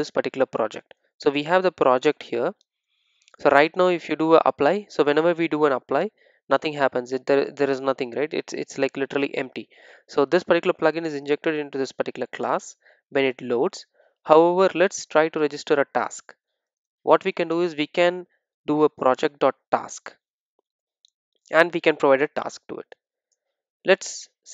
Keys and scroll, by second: 2.1 Return, 17.6 Return.